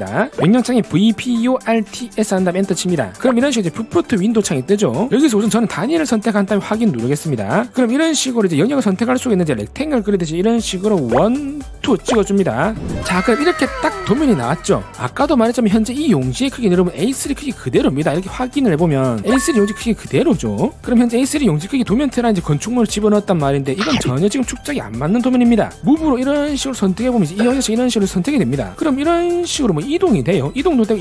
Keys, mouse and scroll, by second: 1.1-3.0 typing, 6.5 click, 7.4 click, 11.5 click, 16.1 right click, 16.9 click, 18.5 click, 26.2 5, 26.4 right click, 28.4 click, 29.2 scroll down 1, 29.4 right click, 29.7 click, 30.0 middle click, 30.5 click.